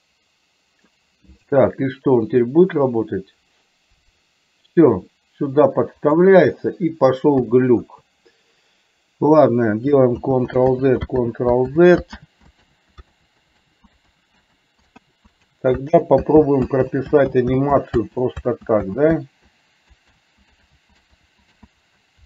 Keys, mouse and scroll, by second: 2.5-6.3 drag, 7.5 KP_2, 7.9 KP_1, 10.3 ctrl+z, 10.9 ctrl+z, 11.4 ctrl+z, 11.9 ctrl+z, 12.4 ctrl+z, 12.9 ctrl+z, 13.4 ctrl+z, 13.8 ctrl+z, 14.3 ctrl+z, 14.8 ctrl+z, 15.3 ctrl+z, 15.7 ctrl+z, 16.0 ctrl+z, 16.5 ctrl+z, 17.0 ctrl+z, 17.5 ctrl+z, 17.9 ctrl+z, 18.3 ctrl+z, 18.8 z, 19.2 z, 20.3 ctrl+z, 20.9 ctrl+z, 21.3 ctrl+z, 21.8 ctrl+z.